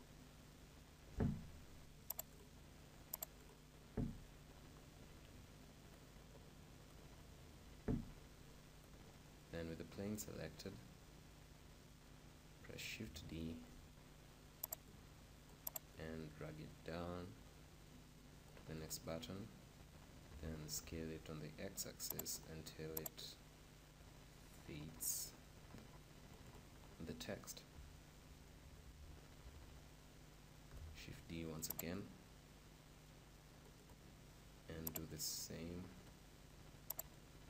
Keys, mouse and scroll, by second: 2.2-4.0 drag, 6.1-8.8 right drag, 9.0-11.6 right drag, 9.7-11.7 middle drag, 13.0 shift+d, 13.7-15.5 right drag, 14.8-17.5 drag, 17.6 click, 20.1 s, 22.3-24.9 drag, 27.2-29.7 middle drag, 30.6 shift+d, 31.1-32.9 right drag, 31.9-33.7 drag, 34.9-36.7 drag, 36.9-37.4 drag.